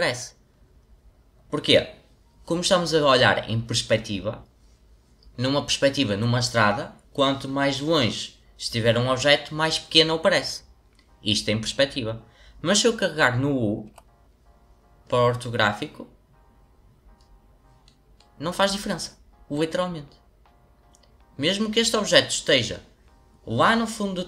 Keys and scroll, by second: 13.8 u.